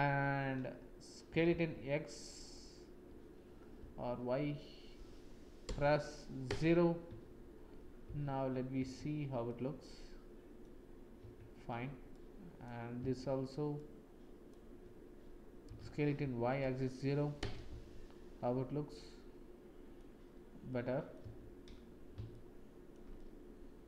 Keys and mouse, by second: 1.2 s, 8.0 shift+z, 9.0 Tab, 9.4 click, 9.9 middle click, 11.2 Tab, 12.2 click, 13.8 shift+click, 15.6 s, 17.8 Tab, 18.9-20.0 middle drag, 20.6 middle click, 20.9 click, 21.2 Tab, 22.3 shift+click, 23.1 click, 23.5 middle click.